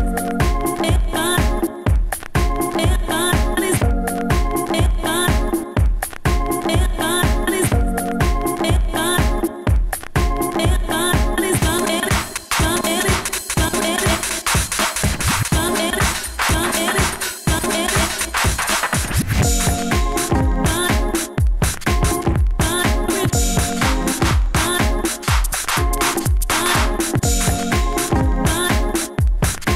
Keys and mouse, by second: 0.0 f, 1.0 s, 2.4 s, 3.5 s, 5.3 s, 5.5 f, 7.2 f, 7.6 click, 9.3 s, 9.5 f, 12.1 s, 12.9 ctrl+z, 13.2 s, 14.5 s, 15.0-15.6 drag, 15.5 s, 17.5-17.9 drag, 18.3 s, 18.4-19.9 drag, 20.0-20.4 drag, 20.8 s, 21.7-24.9 drag, 23.9 s, 24.8 s, 24.8 f, 26.4 s, 27.2 f, 27.9 f, 29.1 s.